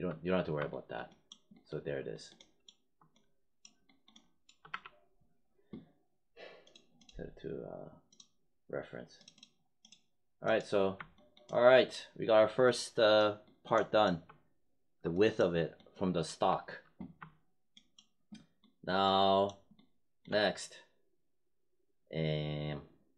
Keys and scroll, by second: 4.6 w.